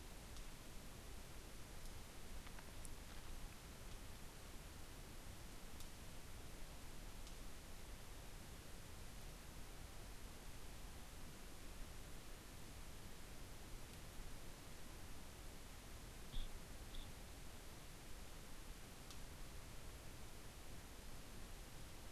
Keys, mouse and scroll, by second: 0.5-1.6 shift+drag, 2.3-3.1 scroll down 2, 4.2-9.3 shift+drag, 10.2-14.0 drag, 14.8 click, 17.0 click, 18.7-22.1 drag.